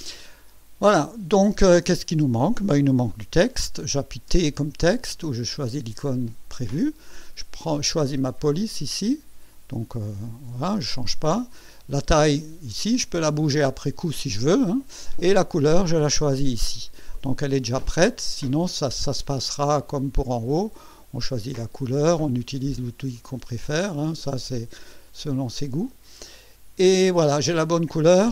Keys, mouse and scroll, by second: 0.4-1.8 drag, 4.3 t, 8.4 click, 10.4 Escape, 18.2 click, 19.5 click, 23.1 click, 23.8 click, 25.4 click.